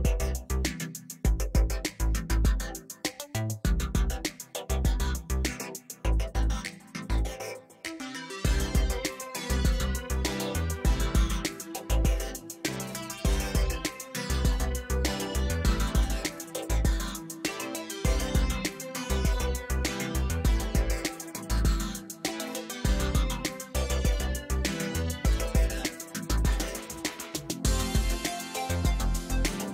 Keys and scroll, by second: 3.3 space, 4.0 ctrl+[, 4.8 ctrl+space, 4.9 ctrl+space, 5.5 ctrl+t, 6.7 ctrl+space, 7.0 ctrl+space, 11.3 ctrl+alt+d, 12.4 ctrl+x, 12.8 ctrl+v, 14.1 ctrl+t, 18.8 space, 21.9 space, 24.2 ctrl+t, 28.0 space, 29.2 ctrl+t.